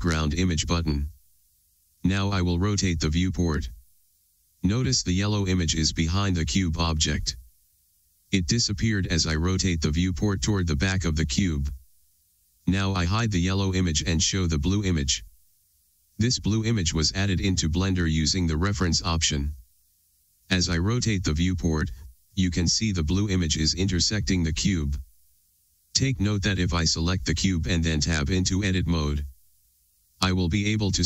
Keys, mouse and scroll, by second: 0.0-2.8 drag, 3.6-6.4 middle drag, 10.5-11.3 middle drag, 13.3-15.0 middle drag, 13.3 KP_1, 15.0 click, 15.7-21.4 drag, 21.4 scroll down 1, 21.5-28.0 middle drag, 28.0 click, 29.3 Tab, 30.9 click.